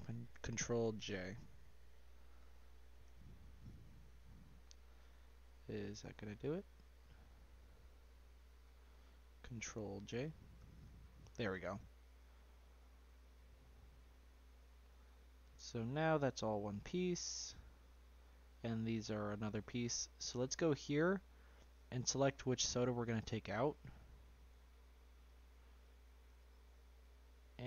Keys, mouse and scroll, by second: 0.6 ctrl+j, 3.0 ctrl+j, 4.3-5.1 scroll down 2, 5.1-5.6 middle drag, 5.6 scroll up 1, 5.6-7.3 middle drag, 7.3 scroll down 2, 8.3 click, 8.9 scroll up 1, 9.0-10.6 middle drag, 10.6 ctrl+j, 12.0-12.4 scroll down 1, 12.4-13.5 middle drag, 13.5-14.4 scroll up 3, 14.4-14.8 scroll down 2, 14.8-16.0 shift+middle drag, 16.0-16.7 scroll up 2, 16.7-17.3 middle drag, 17.3 click, 19.5-19.9 middle drag, 19.9-22.5 scroll down 1, 22.7 Tab, 23.4 click, 24.9 Tab, 25.2 click, 25.8 click, 26.6 Tab, 27.1 shift+middle click, 27.5-27.6 scroll up 3.